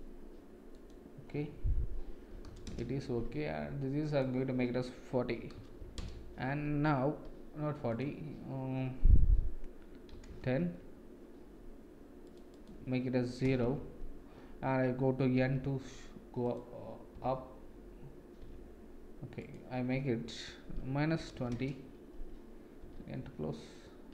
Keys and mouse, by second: 6.0-7.3 drag, 7.9-10.6 drag, 17.2 n, 18.4 n, 22.9 n.